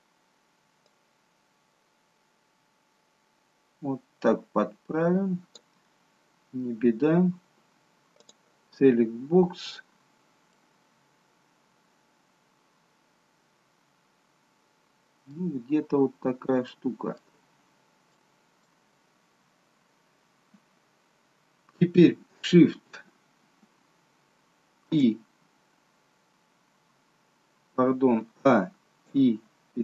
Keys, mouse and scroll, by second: 0.8 click, 8.3 click, 8.9-9.3 scroll down 2, 9.5-10.4 scroll down 2, 10.5 middle click, 15.6-16.5 scroll up 1, 16.7 shift+middle click, 18.2 middle click, 24.9 shift+i, 28.5-29.6 a.